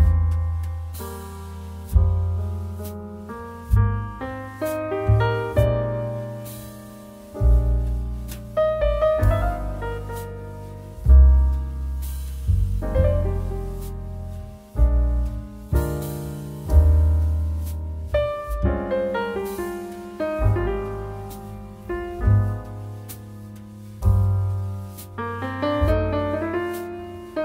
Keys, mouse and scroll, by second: 0.8-4.5 drag, 6.5 click, 6.6 click, 25.0 click.